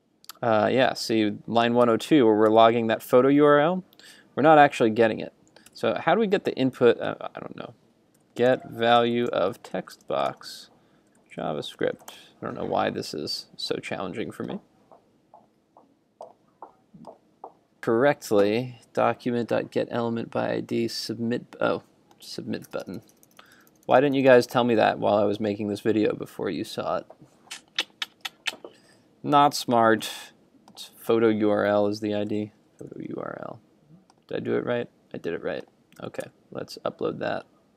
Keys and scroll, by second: 1.9 super+Tab, 5.7 super+Tab, 36.0 super+s, 36.4 super+Tab.